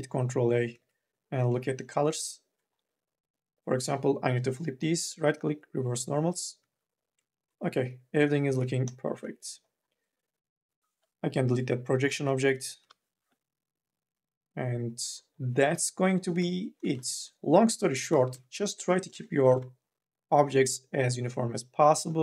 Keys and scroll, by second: 0.9 ctrl+a, 6.8 ctrl+a, 12.6 Delete, 16.2 3, 17.9 4, 18.2 e, 18.9 n, 19.2 b.